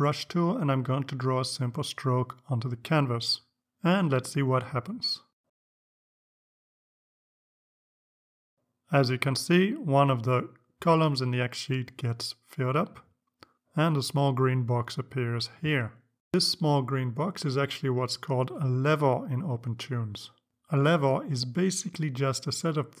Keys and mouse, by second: 2.5 click, 5.6-7.3 drag, 20.7 click.